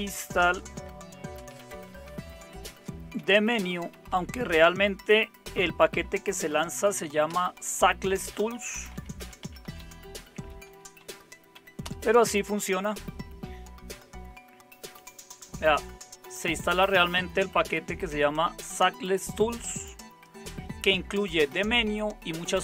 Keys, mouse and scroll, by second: 0.0-5.4 typing, 7.3 Return, 8.9-11.8 typing.